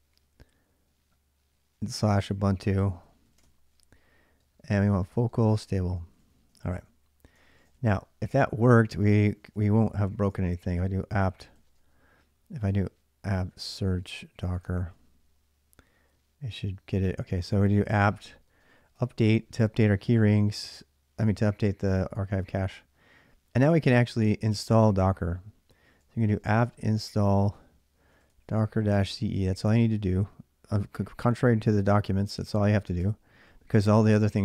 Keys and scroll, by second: 1.7 ctrl+a, 2.1-7.8 typing, 9.1-15.3 typing, 17.4-19.6 typing, 25.8-29.7 typing, 32.0-32.7 typing, 32.8 Return.